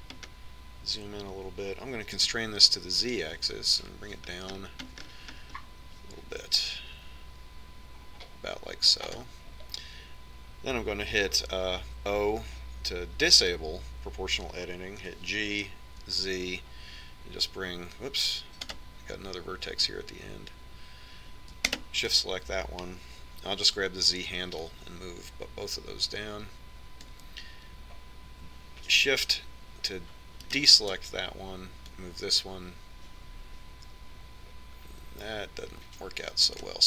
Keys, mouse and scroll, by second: 13.4 o, 16.5 g, 23.2-26.2 right drag, 26.2-28.1 drag, 32.0-34.1 right drag, 33.5-35.8 drag.